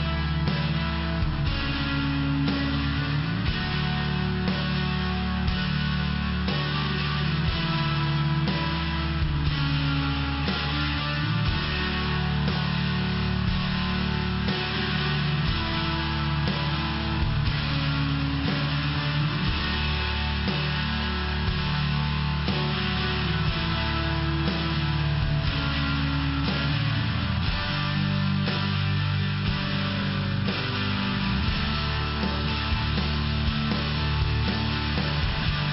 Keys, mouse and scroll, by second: 5.1 click, 6.3 click, 7.7 click, 7.9 click, 8.7 click, 12.6 click, 12.8 click, 15.7 click, 23.2 click, 23.5 click, 28.7 click, 30.1 click, 30.7 click, 33.9 click.